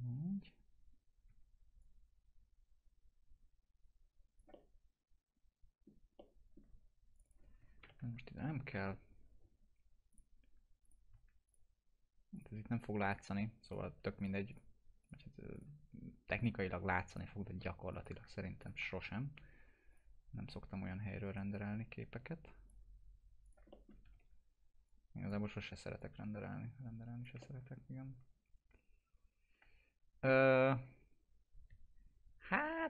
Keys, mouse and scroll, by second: 1.3 w, 1.8-6.1 drag, 4.5-6.2 alt+middle drag, 6.2-6.8 alt+middle click, 7.2 click, 7.8 ctrl+BackSpace, 10.1 click, 21.3 right click, 21.6-22.8 drag, 23.7 click, 23.7 alt+middle click, 23.8-25.4 typing, 24.9-25.5 click, 26.0-27.3 drag, 27.4-32.8 alt+middle drag.